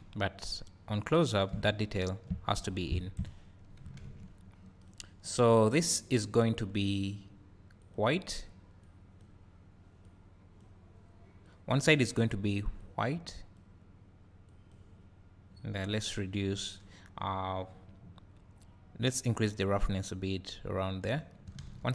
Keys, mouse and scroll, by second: 3.2 KP_0, 4.9 click, 6.8-10.0 drag, 10.9-12.8 drag, 19.5-21.9 drag.